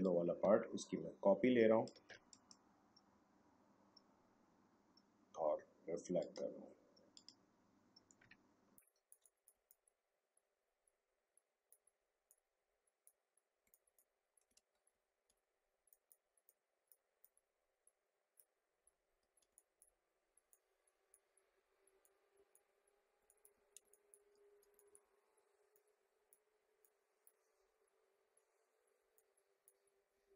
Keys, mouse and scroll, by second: 0.0-2.3 alt+drag, 2.3 right click, 6.2 click, 8.2 space, 8.7-13.6 ctrl+drag, 13.6 space, 13.7 click, 13.9 space, 14.5 a, 15.0 alt+scroll up 1, 15.9-19.3 drag, 19.3 alt+scroll down 1, 19.5 space, 19.7 click, 19.7 space, 20.5-23.1 drag, 23.1-24.9 typing, 23.2 click, 23.6 alt+scroll down 1, 23.9 click, 24.4 alt+scroll up 1, 24.7 click, 25.7-28.4 drag, 29.1 click, 30.2 alt+scroll down 1.